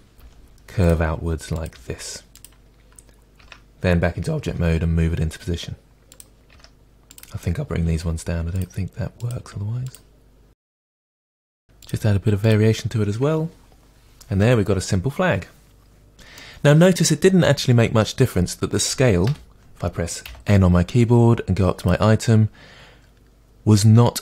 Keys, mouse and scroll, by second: 0.2 g, 0.9 click, 1.5 click, 1.7 g, 2.4 click, 3.4 Tab, 4.4 g, 6.1 click, 6.3 middle click, 6.5 Tab, 7.1 click, 7.9 g, 8.6 click, 9.2 click, 9.4 g, 9.9 click, 10.7 click, 10.9 g, 11.8 click, 11.9 g, 12.5 click, 13.2 Tab, 13.5 scroll down 1, 14.1 scroll down 1, 14.4-15.4 middle drag, 19.3 n, 21.8 click.